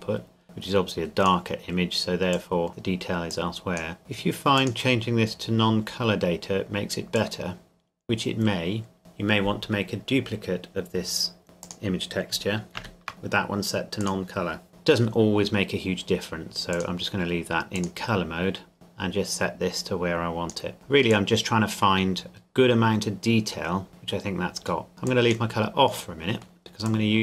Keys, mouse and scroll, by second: 7.1 click, 11.6 click, 12.8 shift+d, 14.0 click, 14.7 Delete, 16.7 click, 24.9 middle click, 25.1 click, 26.3 middle click, 26.9 click.